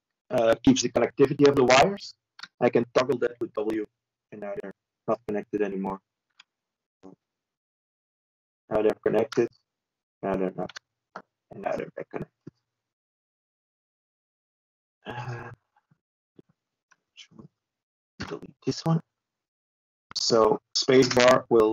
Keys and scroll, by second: 18.6 Escape.